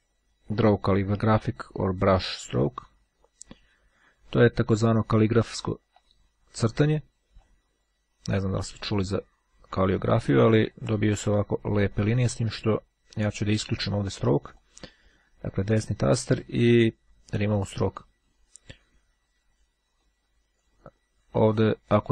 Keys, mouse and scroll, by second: 2.7 click, 5.6-7.2 ctrl+drag, 7.5-10.5 drag, 10.9-12.4 drag, 14.6 right click, 17.4 click, 18.9-19.8 scroll up 1, 20.1-21.2 drag, 21.6 click.